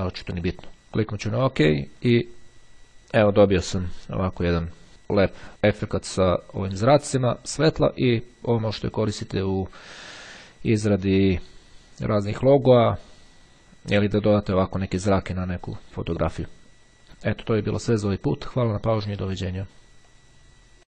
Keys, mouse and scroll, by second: 0.0 click, 1.5 click.